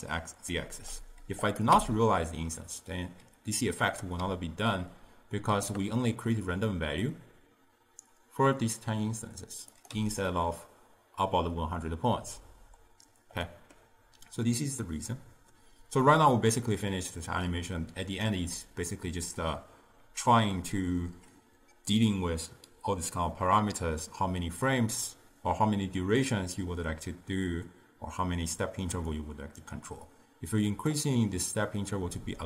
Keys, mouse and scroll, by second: 0.0-0.6 drag, 0.6-1.0 d, 1.5 click, 1.8 m, 9.8 click, 10.0 m, 10.4-13.4 middle drag, 13.5-14.7 middle drag, 14.7-17.8 drag, 29.2-32.3 drag, 32.3-32.4 middle drag.